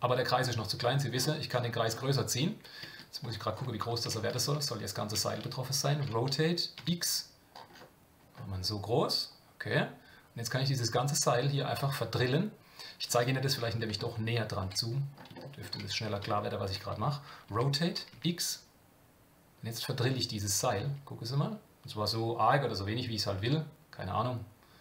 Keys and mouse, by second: 4.5 shift+middle click, 14.0 shift+middle click, 15.4 shift+middle click, 16.3 shift+middle click.